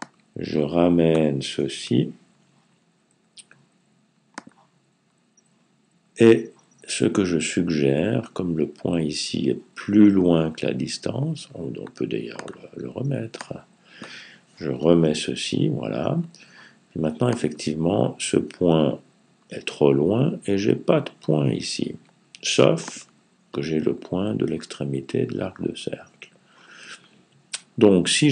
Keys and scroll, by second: 1.7 Left, 14.5 Right.